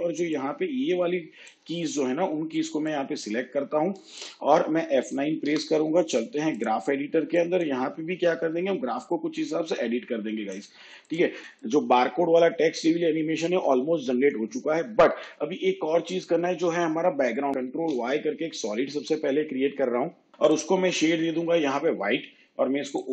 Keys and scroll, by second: 5.5 F9, 15.2 shift+/, 17.8 ctrl+y.